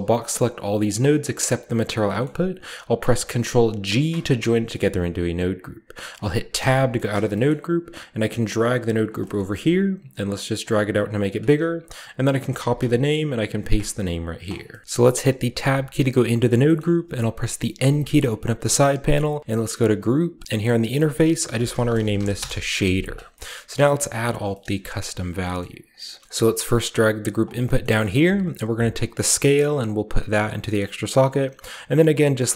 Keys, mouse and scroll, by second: 3.7 ctrl+g, 4.1-5.4 ctrl+scroll up 1, 4.6-6.4 ctrl+middle drag, 5.4-6.4 ctrl+scroll up 1, 6.4 scroll up 1, 6.4 Tab, 6.9 middle click, 7.1 scroll up 1, 7.3-8.8 middle drag, 8.0 click, 8.0-8.8 scroll up 1, 8.9-10.4 drag, 9.1-10.4 scroll up 1, 9.2-10.4 middle drag, 10.8 click, 11.2 click, 12.4 ctrl+c, 12.6 ctrl+click, 13.2 ctrl+click, 13.4 ctrl+v, 13.5-16.2 ctrl+drag, 16.2-17.6 scroll down 2, 16.6-19.5 middle drag, 17.6 scroll down 1, 17.6 n, 20.4-21.7 drag, 21.3-22.1 typing, 22.2 Return, 22.9-23.3 scroll down 1, 23.3 middle click, 23.6 middle click, 23.8 a, 24.1 middle click, 24.1 scroll up 2, 24.5 middle click, 25.4-26.2 scroll up 1, 25.4-26.2 typing, 25.4 middle click, 26.0-27.2 middle drag, 26.6-29.1 drag, 27.6-29.3 scroll up 1, 27.6 middle click, 29.3-32.5 drag.